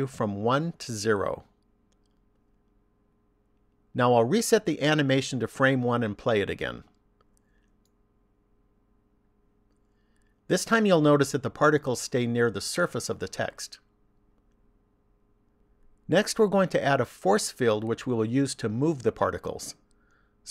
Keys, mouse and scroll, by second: 1.5 click, 6.0 click, 8.0 click, 15.1 click.